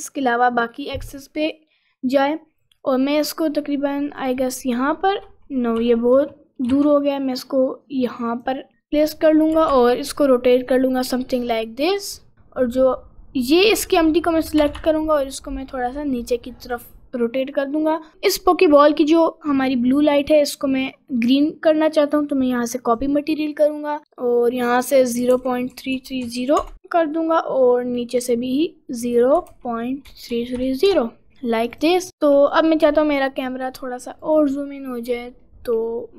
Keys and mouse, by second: 4.5 middle click, 5.8 g, 8.9 click, 9.6 r, 13.4 click, 14.6 r, 21.5 click, 24.7 3, 27.0 click, 29.0 3, 31.8 click, 32.9 g, 35.3 middle click.